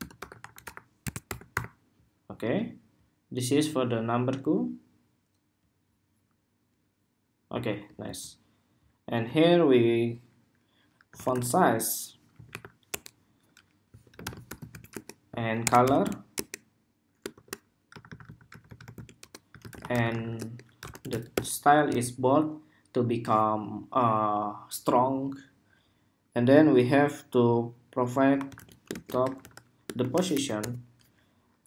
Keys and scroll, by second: 7.7 super+s.